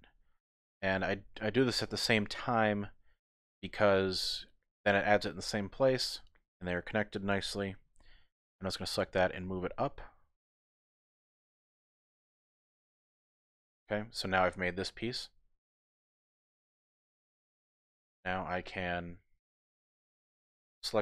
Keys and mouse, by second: 1.1-5.0 middle drag, 5.3 middle click, 9.1 g, 9.1 z, 10.6 click, 12.4-14.2 middle drag, 15.2 middle click, 15.8 typing, 18.1 click, 18.3 typing, 19.5 click, 20.2 shift+click.